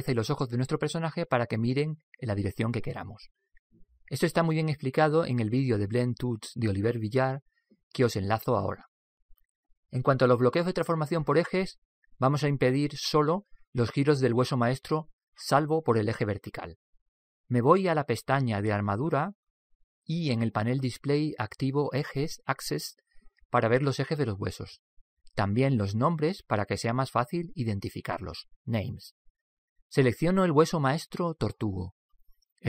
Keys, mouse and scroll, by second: 19.7-23.2 drag, 23.4 click, 27.2 click, 30.9 right click.